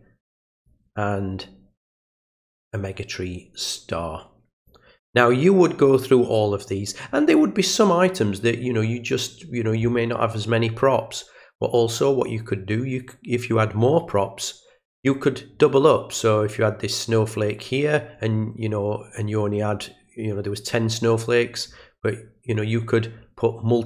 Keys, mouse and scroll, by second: 2.6-4.7 drag.